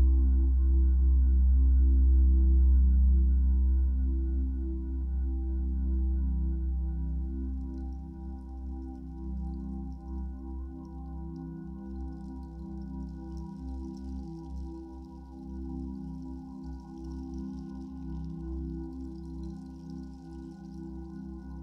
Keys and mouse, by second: 5.4 click, 6.0 drag, 7.1-9.3 drag, 10.6-15.7 drag, 18.9 ctrl+s.